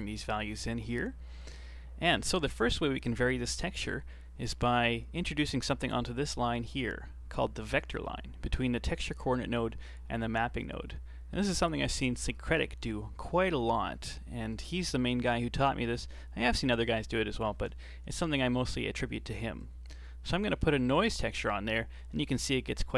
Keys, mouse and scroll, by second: 0.5 middle click, 1.0-1.3 scroll down 5, 1.3-1.8 middle drag, 1.8 scroll down 2, 2.1-4.4 middle drag, 4.4-4.7 scroll up 3, 4.7-8.3 middle drag, 14.5 right click, 17.6 shift+d, 19.6 click, 20.5-22.2 scroll up 8, 20.9-21.3 middle drag.